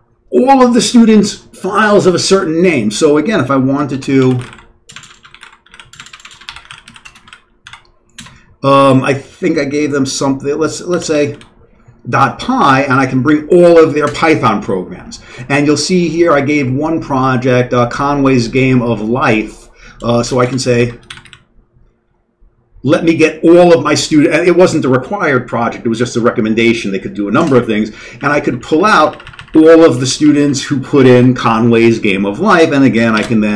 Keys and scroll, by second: 3.9-8.2 typing, 10.8-11.8 typing, 20.2-21.7 typing, 28.2 Down, 28.3 Down, 28.4-29.1 Down, 29.2 Down, 29.3 Down, 29.4 Down, 29.8 Up, 29.9 Up, 30.0 Up, 30.2 Up, 30.4 Up, 33.1 s.